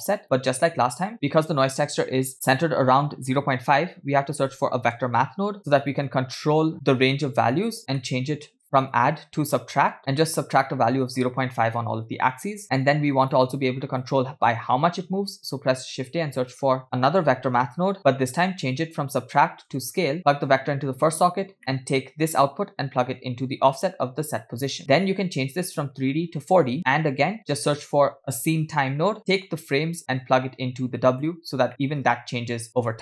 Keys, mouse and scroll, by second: 0.2 click, 0.7 shift+a, 2.3 BackSpace, 6.7-7.8 drag, 8.0 middle click, 8.8-10.1 drag, 10.8-12.6 shift+drag, 12.6 scroll down 2, 12.9 click, 13.8 click, 14.6-15.5 drag, 16.2 shift+a, 19.7 click, 20.5-21.2 drag, 21.6 middle click, 22.4-23.8 drag, 24.8 middle click, 24.9-25.4 scroll up 1, 25.4 scroll up 2, 25.5-26.7 drag, 27.6 middle click, 27.9 shift+a, 30.2-31.4 drag, 31.7 middle drag, 32.0 space, 32.9 space.